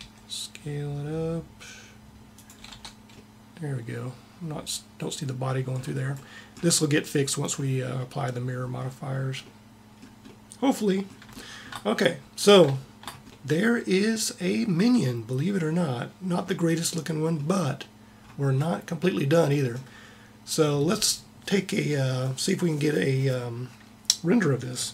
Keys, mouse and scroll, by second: 2.5 click, 2.7 Tab, 3.6 click, 4.3-5.8 middle drag.